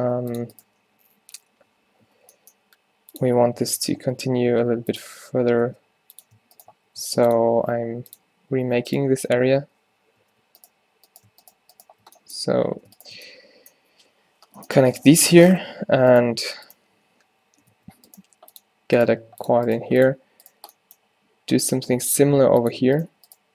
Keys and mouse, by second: 0.0 v, 0.7 h, 2.1 ctrl+z, 2.8 g, 4.2 v, 5.7 v, 6.6 click, 6.8 w, 9.0-10.3 drag, 9.2 f, 10.3 ctrl+z, 12.6 z, 14.6 g, 15.0 f, 16.2-17.8 drag, 17.8 alt+w, 18.3 g, 19.1 g, 19.8 g, 21.0 middle click, 21.3-22.3 middle drag, 22.3 e, 23.0-23.5 drag.